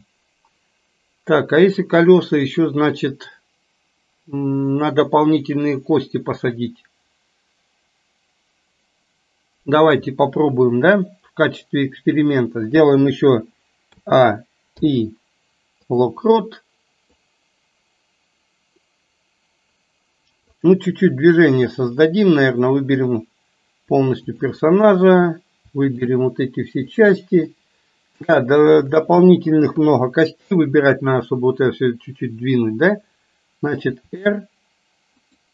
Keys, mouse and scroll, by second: 13.9 a, 14.8 i, 17.2-20.6 drag, 25.9-26.2 shift+drag, 26.9 shift+click, 27.6-28.4 middle drag, 28.8 shift+click, 29.8 KP_3, 34.0 r.